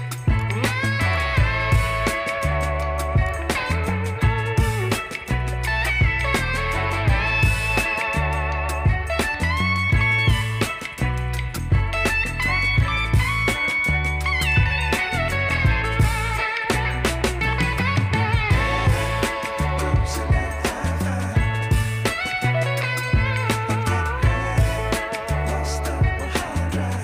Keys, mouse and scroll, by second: 0.9 shift+click, 2.3 ctrl+g, 3.1-10.5 drag, 14.4 click.